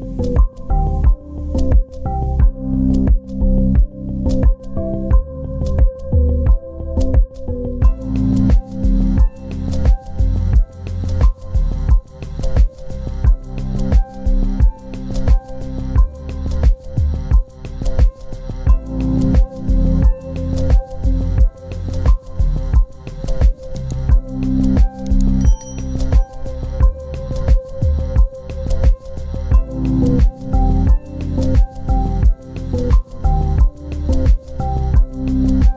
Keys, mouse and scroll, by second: 2.1 scroll down 1, 4.9 Delete, 6.6 scroll down 1, 8.5 ctrl+v, 10.1 End, 11.0 ctrl+z, 14.4 z, 15.8 ctrl+space, 16.8 ctrl+g, 17.9 shift+click, 18.4 c, 19.2 double click, 24.2-25.3 typing, 25.8 Return, 31.7 shift+click, 32.2 c, 33.4 scroll down 1, 35.2 right click.